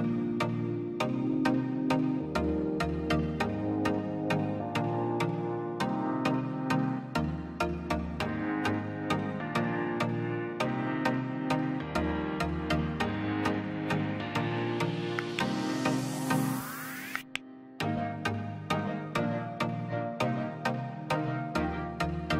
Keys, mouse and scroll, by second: 0.2 scroll up 1, 0.6-2.6 middle drag, 2.6 click, 3.1 scroll down 1, 3.6 click, 3.7 scroll down 1, 4.2 middle click, 4.6-5.1 scroll down 2, 4.8 click, 6.1 m, 6.7 middle click, 7.4 scroll up 1, 8.0 click, 8.9 scroll down 1, 9.4 middle click, 9.7 scroll, 10.6 click, 11.1 m, 11.5 scroll up 1, 12.3 click, 12.8 space, 12.9 scroll down 1, 13.5 middle click, 13.8 Escape, 14.0 click, 14.2 scroll down 1, 15.1 middle click, 15.9 click, 16.7-17.1 scroll down 1, 17.7-18.0 scroll up 1, 18.0-22.3 drag.